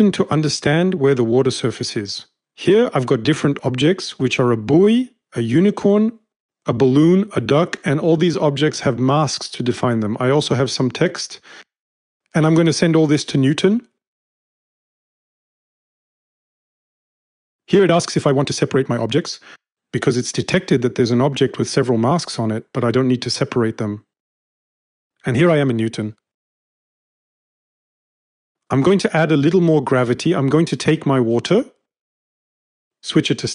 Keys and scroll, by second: 28.6-29.5 typing.